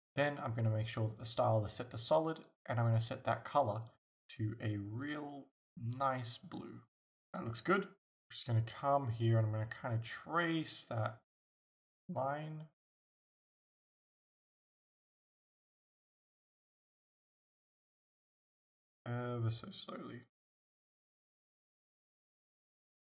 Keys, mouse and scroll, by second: 2.4 click, 8.1-23.0 drag.